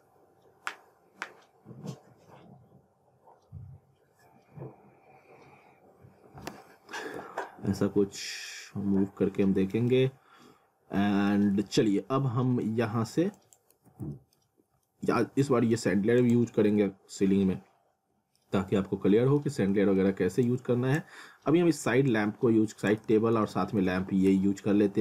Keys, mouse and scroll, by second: 7.7 alt+middle click, 8.7 scroll down 1, 9.0 alt+middle click, 9.9 alt+middle click, 11.5 scroll down 1, 11.9 alt+middle click, 12.9-13.4 scroll up 1, 13.4 click, 13.7 z, 14.1 middle click, 14.6 scroll down 1, 14.9 middle click, 16.2 click, 16.6 scroll up 1, 16.8 middle click, 18.7 alt+middle click, 20.4 click, 21.4 scroll down 1, 22.1 click, 23.4 z, 23.8 alt+w, 24.3 z, 24.7-25.0 scroll down 1.